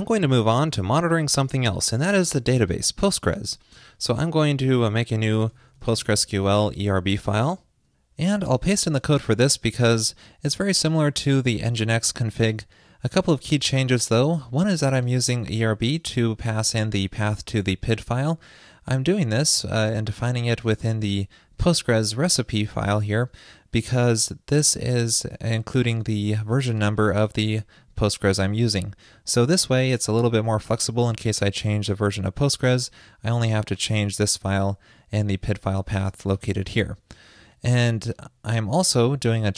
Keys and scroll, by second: 9.7 super+v, 20.5 super+s.